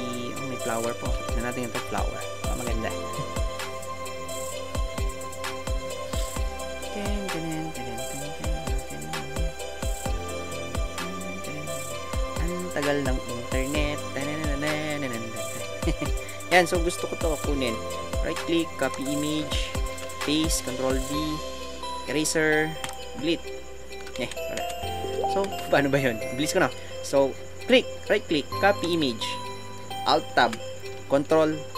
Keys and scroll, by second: 19.4 alt+Tab, 24.5 ctrl+alt+z, 25.4 Tab.